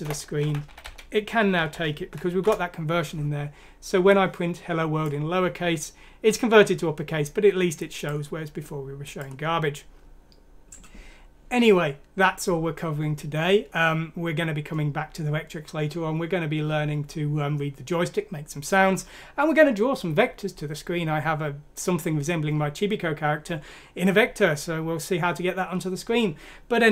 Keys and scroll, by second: 0.0-0.7 typing, 1.7-2.4 typing, 2.4 Return.